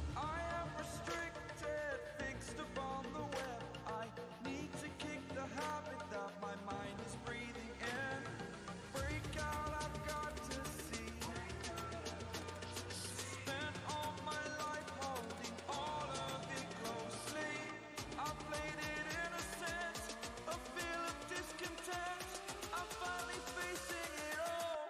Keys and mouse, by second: 7.6 click, 10.3-11.5 alt+shift+click, 18.8 click, 21.8-24.8 drag.